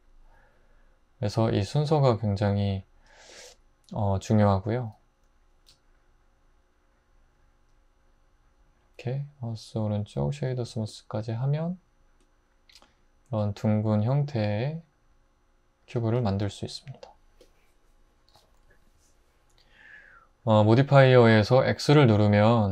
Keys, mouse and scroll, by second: 19.0 x.